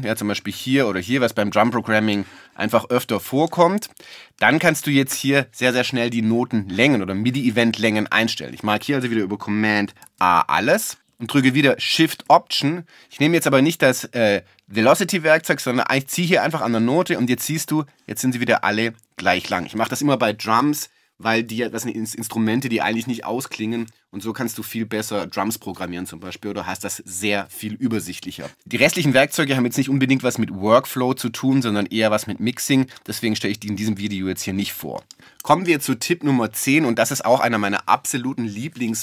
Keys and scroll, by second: 10.0 super+a.